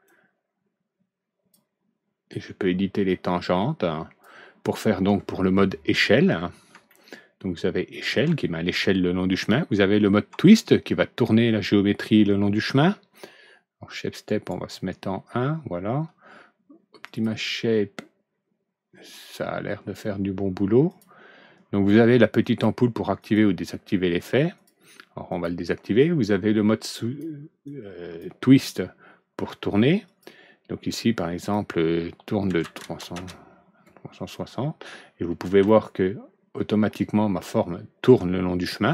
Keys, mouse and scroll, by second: 0.0-1.4 drag, 3.0-4.1 drag, 5.6 scroll down 1, 6.6 alt+Right, 6.8-8.1 middle drag, 14.2 right click, 15.5 middle click, 17.0 click, 20.8 click, 22.3 click, 23.1 click, 24.5 click, 25.2 click, 26.8 click, 27.6-28.1 drag, 30.0 click, 31.1 click, 32.4 alt+Right, 35.5 alt+Right, 35.6-38.0 middle drag, 37.5 scroll up 1.